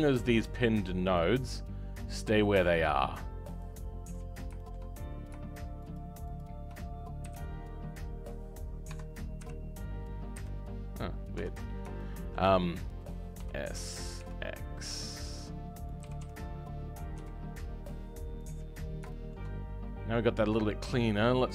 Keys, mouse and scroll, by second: 6.3 shift+click, 13.4 s.